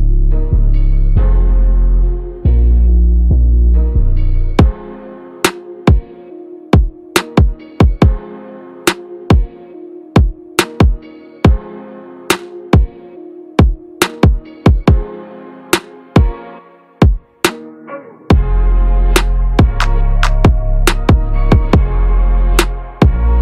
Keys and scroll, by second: 22.6 ctrl+a, 23.2 ctrl+v.